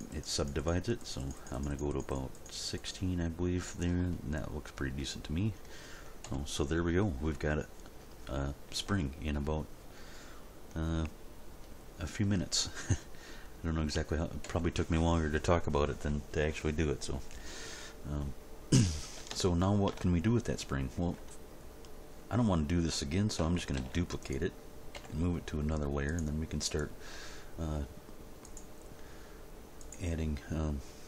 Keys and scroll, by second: 6.2 End, 8.8 Tab, 14.4 End, 23.7 shift+d, 26.0 m.